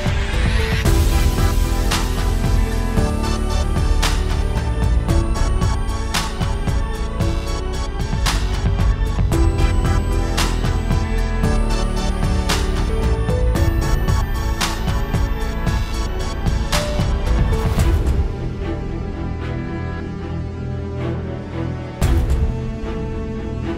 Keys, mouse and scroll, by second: 3.4-3.7 scroll down 2, 3.6 shift+middle click, 3.7-4.0 scroll up 3, 4.0 click, 4.1-4.5 scroll down 2, 4.3 middle click, 4.5 click, 4.7 middle click, 4.9 KP_Decimal, 5.2 middle click, 5.4 scroll down 2, 5.5 middle click, 5.7 scroll up 2, 5.9 click, 6.0 scroll down 4, 6.1 shift+middle click, 6.4 click, 6.4 scroll up 3, 6.4 scroll down 7, 6.6 shift+middle click, 6.7-7.1 scroll up 2, 6.8 middle click, 7.1 click, 7.5 KP_Decimal, 7.7 scroll down 1, 7.7 middle click, 8.1 middle click, 8.4 click, 9.0 click, 9.8 r, 11.2 click, 11.8 s, 12.3 scroll down 1, 12.4 shift+middle click, 12.7 click, 13.3 click, 14.0 Tab, 14.2 click, 14.6 o, 15.2 ctrl+space, 15.3 scroll down 3, 15.5 middle click, 15.6-16.1 scroll up 3, 16.1 shift+middle click, 16.5 o, 19.9 click, 20.4 Tab, 23.4 Tab, 23.4 alt+a.